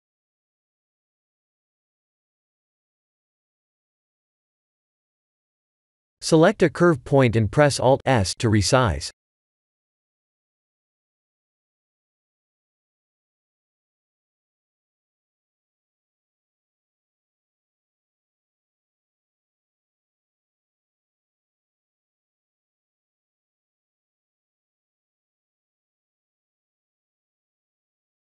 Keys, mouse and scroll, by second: 3.8 Tab, 4.3 scroll up 4, 5.1 shift+middle click, 6.4 click, 7.5 alt+s, 10.4 shift+middle click, 11.8 click, 15.4 click, 16.4 alt+s, 19.6 click, 22.1 click, 22.8 alt+s, 24.7 click, 27.9 click.